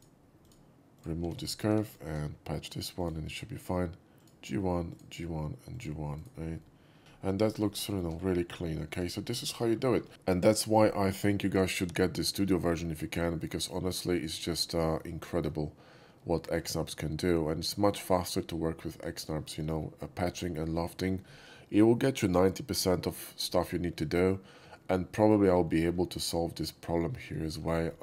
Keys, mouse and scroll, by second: 0.0 click, 0.5 click, 1.0 click, 1.5 middle click, 1.5 x, 1.9 click, 3.1 click, 4.3 alt+click, 5.0 click, 5.8 click, 6.2 right click, 6.6-7.0 middle drag, 7.1-7.7 scroll down 4, 7.7 alt+middle click, 8.0 alt+middle click, 8.5 scroll down 1, 8.9 shift+middle click, 9.0 scroll up 1, 9.1 scroll down 1, 9.2 scroll up 1, 9.5 shift+middle click, 12.8 alt+middle click, 13.4 alt+middle click, 14.3 shift+middle click, 14.7-15.0 shift+middle drag, 15.3 shift+middle click, 16.4 shift+middle click, 25.2 middle click, 25.8 shift+middle click, 27.5 shift+middle click, 27.6 scroll down 1, 27.7-28.0 scroll up 3.